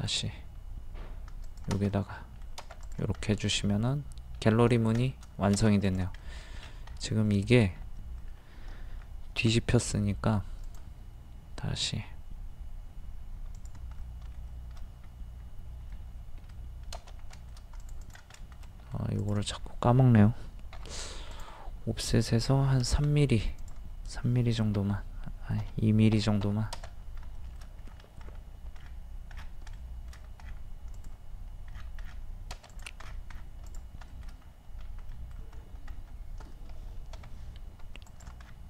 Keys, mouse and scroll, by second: 1.5 click, 1.9 middle click, 2.8 click, 3.2 scroll down 1, 3.6 middle click, 5.0 shift+middle click, 5.9 click, 6.2 middle click, 6.6-7.3 scroll up 1, 7.3-9.1 middle drag, 9.4 m, 10.6 click, 14.0-15.2 middle drag, 15.3-15.9 scroll up 1, 15.9 middle click, 17.8 click, 18.7 middle click, 19.2 click, 19.6 scroll up 1, 20.7 o, 21.3 click, 23.0 ctrl+z, 23.6 click, 24.8 KP_3, 25.6 BackSpace, 26.2 KP_2, 27.3 shift+scroll up 1, 27.4 shift+middle click, 27.9-28.2 scroll up 1, 28.8-29.3 scroll down 1, 29.8-30.2 shift+scroll down 2, 30.9 click, 31.7-32.0 scroll down 1, 32.7 click, 33.0 scroll down 1, 33.7 click, 34.1 shift+middle click, 34.4-34.8 scroll up 1, 35.1 middle click, 35.6 scroll up 1, 38.4-38.6 scroll down 1.